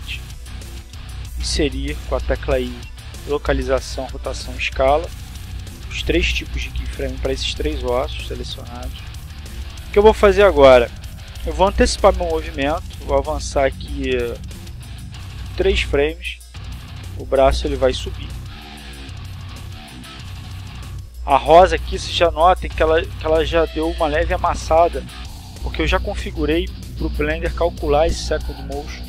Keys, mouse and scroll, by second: 5.0-9.5 drag, 10.3 middle click, 12.6 r, 14.5 middle click.